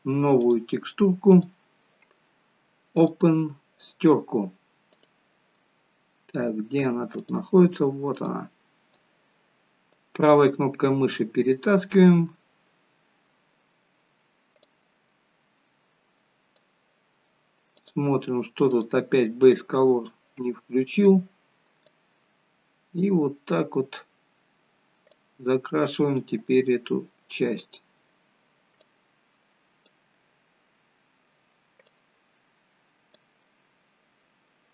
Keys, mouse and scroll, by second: 0.3 click, 1.3 click, 9.8 right click, 11.5 right click, 12.8-13.3 scroll up 1, 13.4 scroll down 2, 14.4 scroll down 1, 14.6 click, 18.7 click, 22.0 click, 23.9 middle click, 25.2 click, 26.4 middle click, 28.9 click, 30.1 middle click, 33.3 middle click.